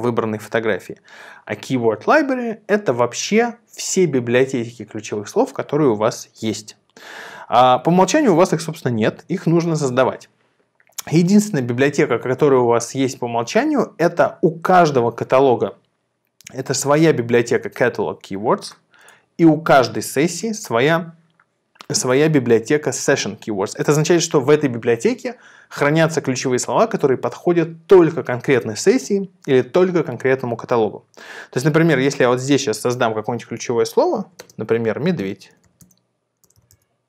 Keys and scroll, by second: 35.1-37.0 typing.